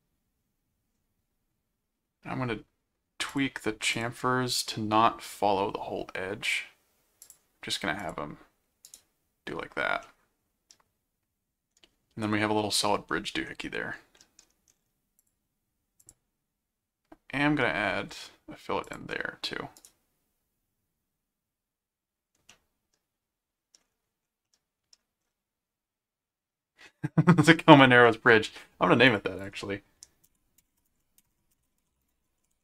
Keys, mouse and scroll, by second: 3.3 click, 3.9 click, 7.2 click, 8.0 click, 8.8 right click, 10.0-13.4 middle drag, 14.1 middle click, 15.2 click, 16.0 click, 18.8 click, 19.8 right click, 22.5-23.8 middle drag, 24.4 middle click, 27.5 middle click, 29.0 click, 30.3-32.6 typing.